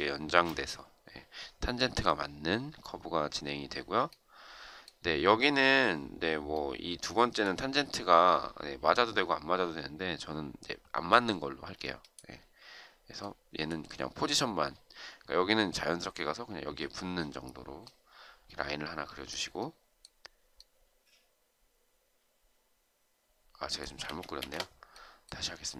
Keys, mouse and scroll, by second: 23.8 Escape, 24.3 Escape.